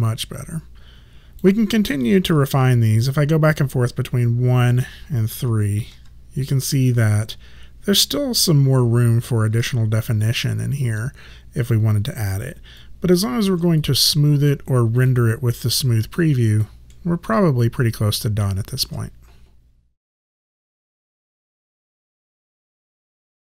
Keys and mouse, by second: 3.0 1, 5.3 3, 6.0 1, 9.6 3, 12.9 alt+click, 13.9 right click, 15.1 click, 15.9 alt+right click, 17.0 alt+middle click, 17.7 alt+right click.